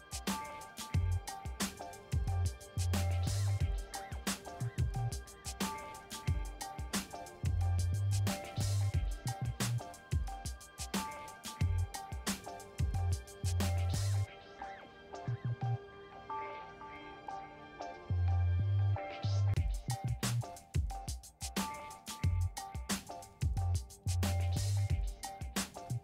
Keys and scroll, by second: 0.0-0.7 typing, 2.3 shift+p, 2.8 j, 3.4 BackSpace, 6.1-8.7 typing, 9.0 Return, 9.5 ctrl+a, 10.3 v, 12.0 ctrl+d, 14.9 t, 18.3 4, 18.7 5, 19.5 Return, 23.3 4, 23.7 5, 24.1 Return.